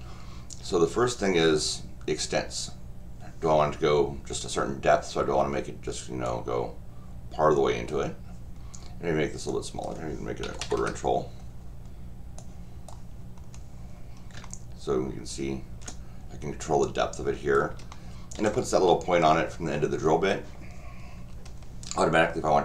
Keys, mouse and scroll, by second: 6.2-7.9 drag, 9.5 click, 12.4 click, 13.4 scroll down 2, 14.4-15.7 shift+middle drag, 16.6-17.5 drag, 17.9 shift+middle click.